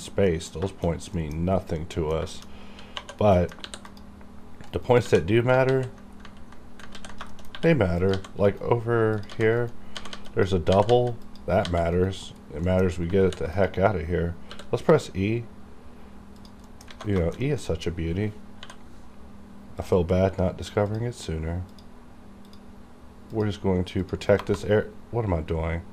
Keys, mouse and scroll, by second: 0.0 shift+scroll up 1, 0.3 middle click, 0.7 shift+middle click, 1.2 middle click, 2.3 shift+middle click, 2.3 shift+middle click, 2.6 scroll down 1, 3.0 2, 3.4 middle click, 3.7 ctrl+r, 3.9 ctrl+click, 4.7 right click, 5.1 1, 5.7 ctrl+z, 6.1 scroll up 1, 6.9 ctrl+x, 7.3 shift+middle click, 7.5 scroll up 1, 8.0 click, 8.1 g, 8.5 right click, 8.5 right click, 8.8-9.2 scroll down 1, 9.2 click, 9.3-11.6 typing, 9.6 right click, 9.6 right click, 10.3 click, 11.3 click, 11.9 right click, 12.3-12.7 scroll down 1, 12.7 middle click, 12.9 scroll up 1, 13.2 ctrl+r, 13.5 ctrl+click, 13.6 ctrl+click, 14.5 e, 16.4 click, 16.7 middle click, 16.9 alt+a, 17.2 shift+middle click, 17.5 middle click, 17.7-18.6 scroll up 2, 18.6 k, 19.8 click, 24.4 KP_Enter.